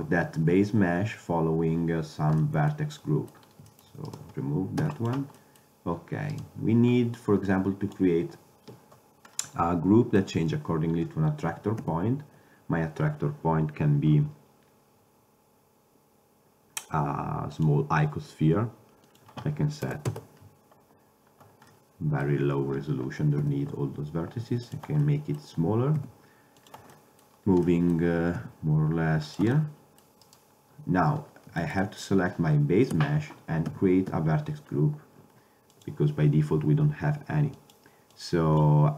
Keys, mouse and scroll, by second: 0.9-2.5 middle drag, 4.2 right click, 4.9 x, 6.4-7.1 right drag, 7.6-8.3 middle drag, 8.3-9.4 drag, 9.5-11.4 middle drag, 11.9 shift+a, 19.2-21.1 drag, 21.8 middle drag, 23.5 s, 26.1 g, 28.5 g, 33.0 Tab, 33.8 a, 34.2 a, 35.8-38.9 drag.